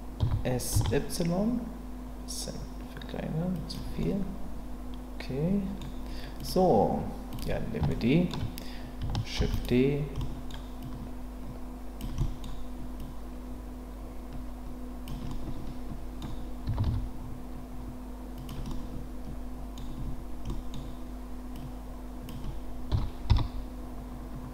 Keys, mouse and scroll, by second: 0.2 s, 0.7 y, 3.5 click, 4.0-5.8 middle drag, 5.8-6.4 scroll down 1, 6.4 click, 7.3 click, 7.9-8.3 shift+middle drag, 9.4 shift+d, 9.5-10.3 right drag, 10.3 middle click, 10.8-12.0 drag, 12.2 scroll up 1, 12.4 middle click, 12.4-13.0 scroll down 1, 15.3-16.2 middle drag, 16.6 s, 16.8 x, 18.3 click, 18.7-19.7 middle drag, 20.5 middle click, 21.5-22.2 drag, 22.9 s, 23.3 z.